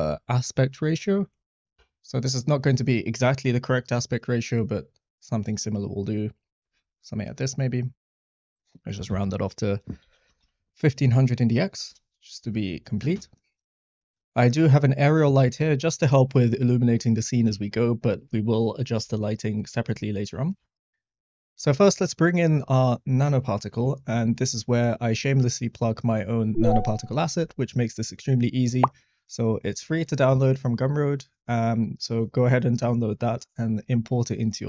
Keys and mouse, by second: 0.7 click, 4.0-6.7 drag, 8.4-11.9 drag, 10.5 0, 14.0 middle click, 14.6 middle click, 20.9 middle click.